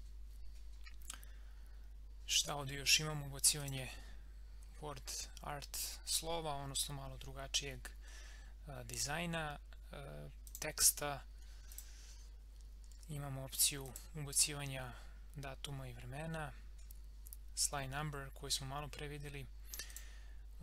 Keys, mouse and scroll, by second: 3.6 click, 10.4 click, 19.9 click.